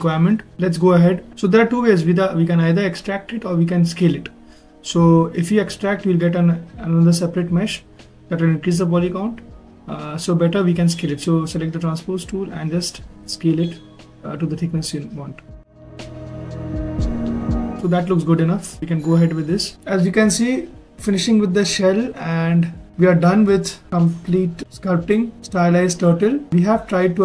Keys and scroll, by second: 8.4 ctrl+z, 12.3 w.